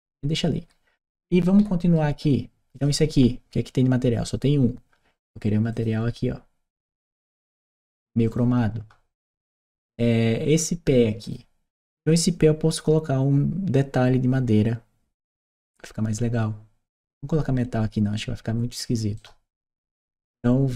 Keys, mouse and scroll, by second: 1.2 right click, 2.5 click, 5.5 click, 8.1 click, 9.0 right click, 11.0 click, 18.9-20.7 right drag.